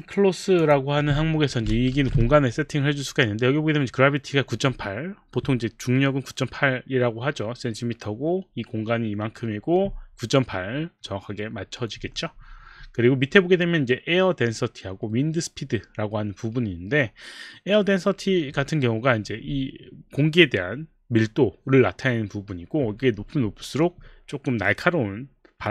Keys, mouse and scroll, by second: 0.6 click, 1.9 ctrl+a.